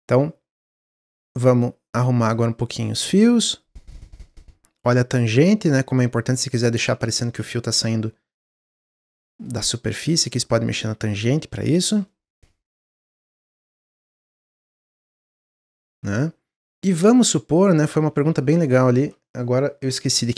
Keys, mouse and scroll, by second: 1.2-2.3 drag, 3.4 click, 4.2 click, 5.1 middle click, 5.4-6.2 scroll up 2, 6.2 click, 6.5-8.3 middle drag, 8.3 click, 9.0-10.1 middle drag, 10.1 click, 11.3-12.9 middle drag, 12.9 click, 14.5 scroll down 1, 14.7-15.8 middle drag, 15.8-16.1 scroll up 1, 16.1 middle click, 17.0 click, 17.7 click, 18.8 shift+click.